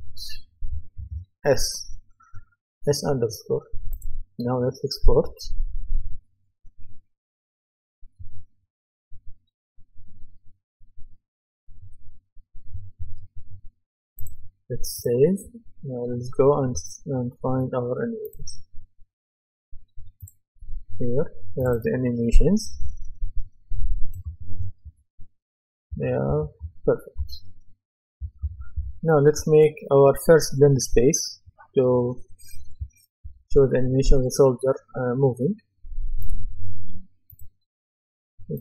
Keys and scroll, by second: 24.0-29.4 typing.